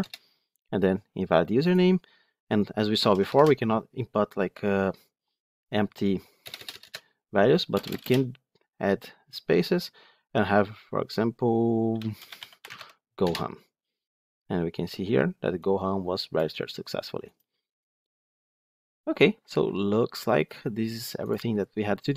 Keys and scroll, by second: 3.1 ctrl+shift+F10.